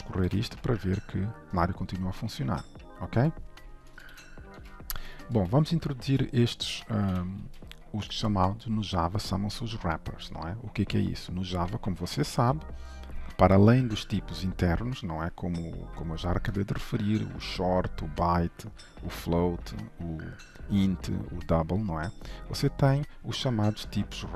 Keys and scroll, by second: 0.3 shift+F10, 4.2 ctrl+shift+F12, 7.1 ctrl+/, 7.5 ctrl+s.